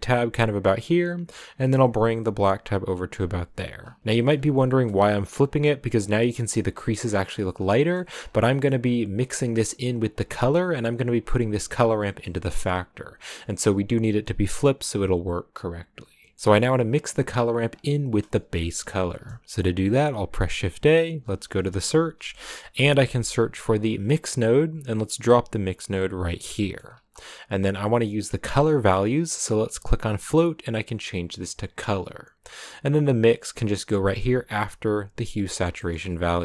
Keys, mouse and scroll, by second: 3.1-3.7 scroll down 4, 3.7-4.3 scroll up 7, 4.0 middle click, 4.3 middle click, 4.8 middle click, 4.9-5.9 scroll up 2, 7.1-7.7 scroll down 5, 7.7-9.0 middle drag, 9.0-10.7 scroll down 3, 10.7-12.3 scroll down 1, 12.3-12.7 scroll down 1, 15.5 scroll down 2, 16.2 scroll down 2, 16.4-24.6 middle drag, 31.8-34.0 drag.